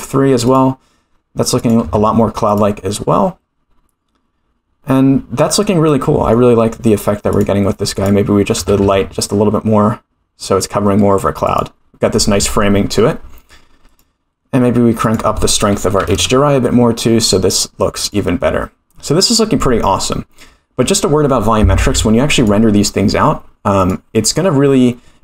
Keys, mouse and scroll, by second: 0.4 click, 1.5-4.0 drag, 5.8-6.3 middle drag, 7.3 click, 7.9 click, 8.5 r, 13.8 click, 15.0-17.0 drag, 18.0 click, 22.3 click, 23.7-24.4 drag.